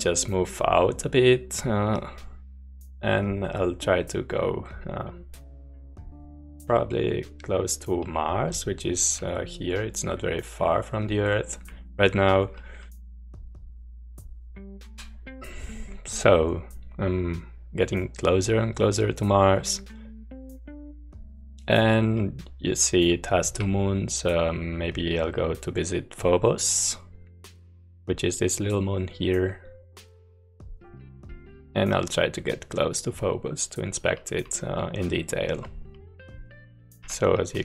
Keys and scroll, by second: 3.1 a, 8.2-9.4 typing, 11.0-13.6 typing, 19.3-19.7 a, 23.7-37.6 typing.